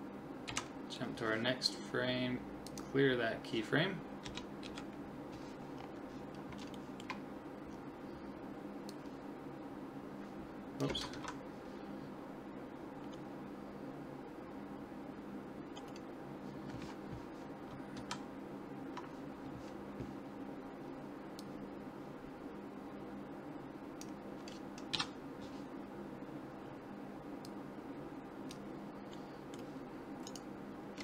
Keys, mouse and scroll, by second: 0.5 Right, 2.7-4.5 drag, 4.3 Left, 4.7 Right, 5.8-8.8 middle drag, 8.9-10.6 drag, 11.2 ctrl+z, 12.8 middle click, 12.9-13.2 scroll up 1, 13.2-17.0 middle drag, 18.1 ctrl+z, 21.4 click, 24.9 KP_7, 26.7-28.4 middle drag, 27.5-29.2 drag, 28.6 middle click, 29.2-30.3 middle drag, 30.3-31.0 right drag, 30.8-31.0 middle drag.